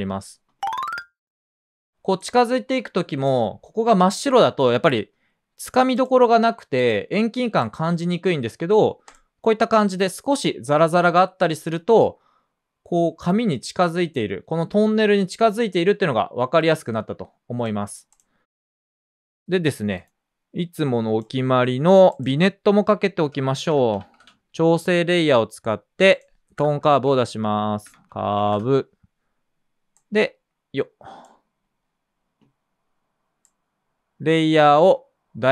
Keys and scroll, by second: 1.1 space, 23.2 Return, 23.2-24.4 typing, 26.5-29.0 typing.